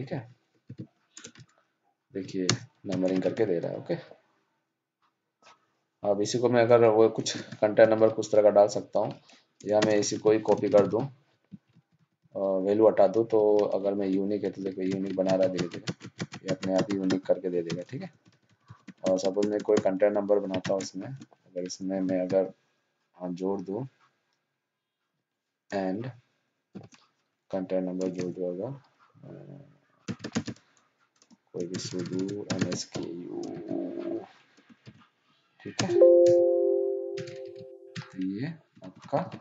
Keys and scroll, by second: 0.6 ctrl+c, 9.7 ctrl+shift+Down, 10.1 ctrl+c, 13.9 ctrl+d, 18.0 ctrl+z, 37.1 ctrl+shift+Down, 37.4 ctrl+d.